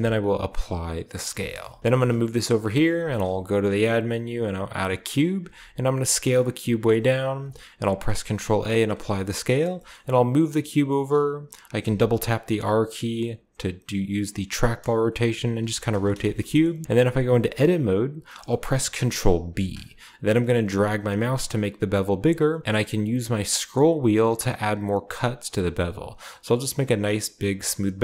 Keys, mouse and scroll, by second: 0.0-0.4 typing, 1.1 scroll up 1, 1.2-4.4 shift+drag, 1.8 g, 3.0 typing, 4.5-6.2 drag, 4.7-6.2 scroll down 1, 5.4 typing, 7.2-8.5 typing, 7.3-8.8 drag, 7.4-8.8 scroll up 1, 8.8-9.1 scroll up 1, 8.9-9.7 drag, 9.1-10.7 scroll down 1, 9.6 g, 9.9 middle click, 10.7-11.3 drag, 10.7-11.3 scroll down 1, 11.8 r, 11.9 r, 14.9 drag, 15.2 r, 15.5 click, 15.6 g, 16.3-17.2 shift+middle drag, 16.7-18.2 shift+scroll up 1, 16.8 click, 17.2 Tab, 17.4 typing, 18.2 scroll up 1, 19.2-19.9 typing, 23.0 scroll up 1, 23.7-27.9 scroll up 3, 27.9-28.0 drag.